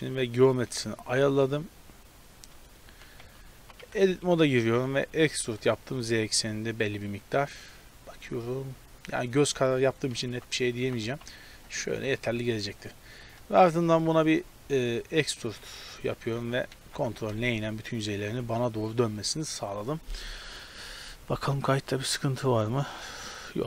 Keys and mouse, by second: 0.0-0.6 middle drag, 2.9 t, 3.2 Tab, 3.6 z, 3.8 a, 5.0 e, 8.6-10.1 middle drag, 10.8 g, 11.8 middle click, 12.2 a, 12.4 a, 12.6-13.8 middle drag, 14.8 e, 16.1 a, 16.3 a, 16.8 ctrl+n, 18.3 a, 19.1 click.